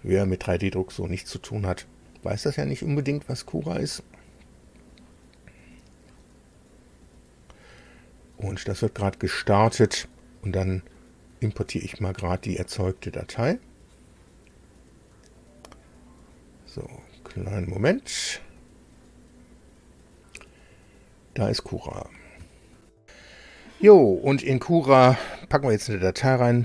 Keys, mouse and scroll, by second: 22.8 super+r.